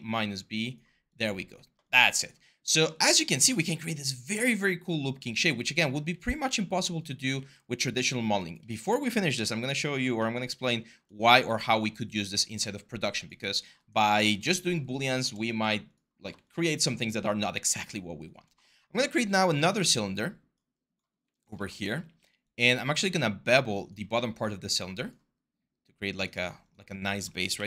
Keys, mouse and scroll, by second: 7.1 r, 11.1 w, 15.3 q, 19.5 w, 21.8 r, 27.3 t.